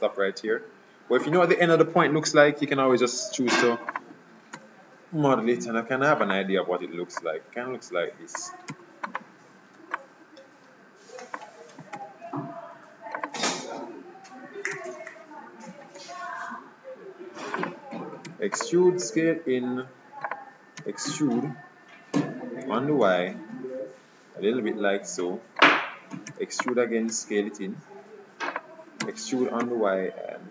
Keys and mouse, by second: 3.3 e, 4.6 s, 7.3-9.1 drag, 8.8 e, 10.1-11.9 drag, 12.0 s, 14.8 e, 18.4 e, 19.1 s, 20.9 e, 26.4 e, 27.2 s, 29.2 e.